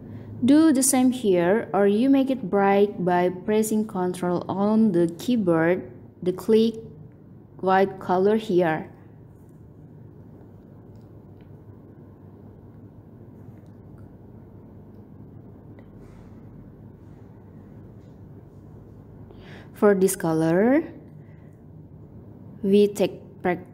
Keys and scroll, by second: 12.6 ctrl+End.